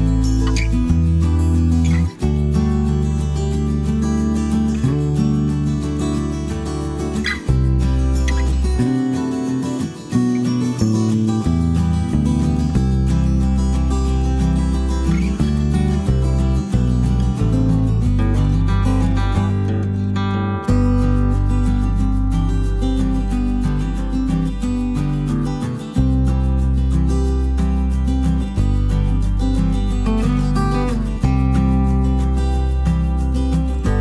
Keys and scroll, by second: 8.0 b, 12.6 ctrl+*, 13.9 Page_Down, 21.4-22.9 typing, 23.7 ctrl+d, 25.5 b, 29.9 ctrl+*, 30.6 Page_Down.